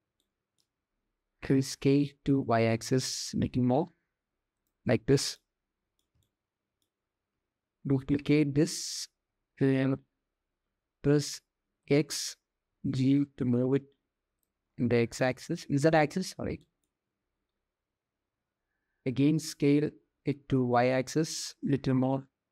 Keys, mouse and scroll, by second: 1.0 s, 5.0 click, 5.8 shift+click, 7.9 shift+d, 14.8-15.1 shift+drag, 16.2 shift+drag, 18.7 s.